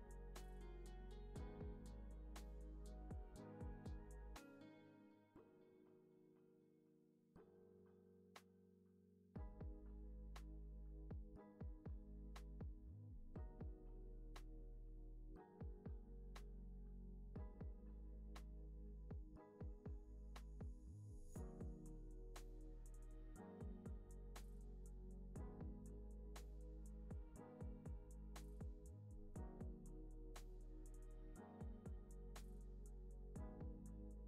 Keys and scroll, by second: 0.0-0.5 typing, 1.5 super+=, 2.9 space, 4.7 alt+z, 5.5 alt+x, 7.0 alt+x, 18.2 alt+x, 22.3 alt+x, 23.2 alt+z, 24.7 alt+x, 32.0 alt+w.